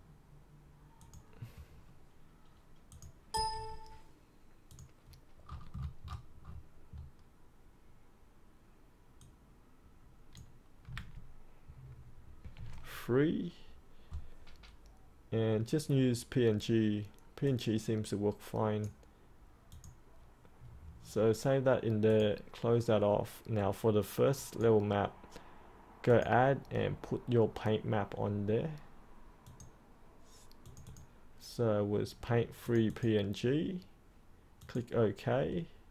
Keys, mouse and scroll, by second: 0.9 click, 1.6-2.9 scroll up 1, 2.9 click, 3.3 click, 4.6 click, 5.4-6.9 scroll down 1, 6.9 scroll up 1, 9.1 click, 10.9 Tab, 12.4 typing, 17.4-18.8 drag.